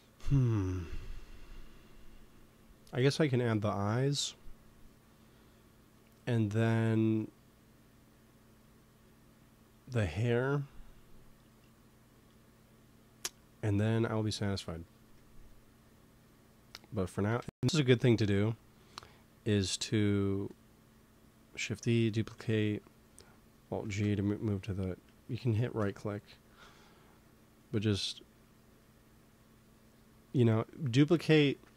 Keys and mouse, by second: 14.3 middle click, 15.9-17.3 drag, 17.3 shift+d, 23.8 alt+g, 25.7 m, 29.7-31.1 drag, 31.1 right click.